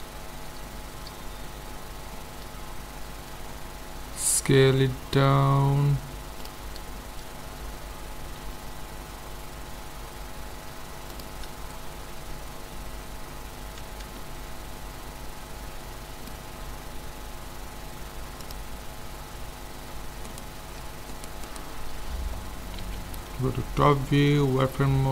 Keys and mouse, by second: 0.2-3.9 middle drag, 3.9 s, 8.4 s, 9.4-11.5 middle drag, 13.9 z, 18.4-20.3 drag, 20.3-23.0 right drag, 22.8 KP_7, 23.3 right click, 23.3 middle click, 23.8 z, 24.3-25.1 middle drag.